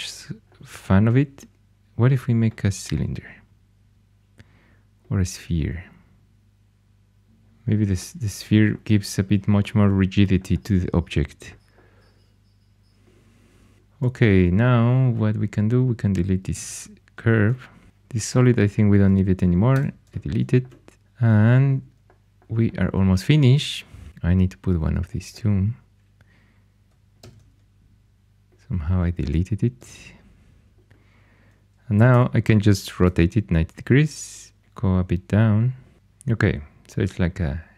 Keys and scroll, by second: 16.5 x, 19.7 x, 27.1 shift+d, 32.0 r, 34.3-35.1 typing.